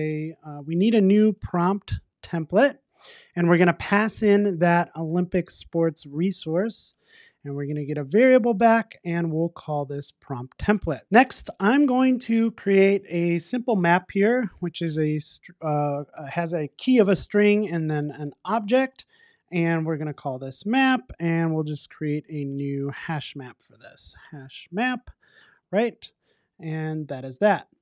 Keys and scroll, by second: 2.6 Return, 25.1 Return.